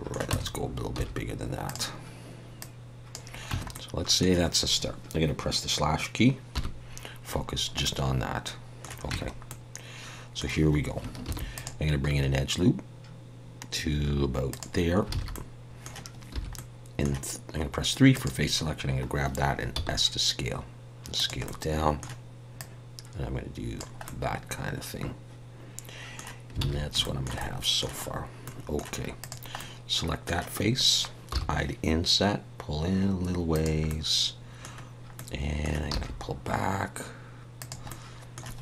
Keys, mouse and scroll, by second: 0.3 Tab, 0.9 s, 2.6 click, 3.5 Tab, 3.7 middle click, 6.5 /, 7.4-8.0 scroll down 4, 7.8 middle click, 9.1 Tab, 9.5 middle click, 11.2 ctrl+r, 15.1 alt+a, 15.3 middle click, 16.3 3, 16.5 middle click, 18.1 click, 21.1 s, 21.4 middle click, 22.6 click, 24.0 middle click, 26.6 alt+a, 27.0 shift+middle click, 27.3 middle click, 28.1-28.4 scroll up 1, 28.4 middle click, 29.2 click, 29.5 middle click, 31.3 i, 33.9 middle click, 35.9 e, 37.9 middle click.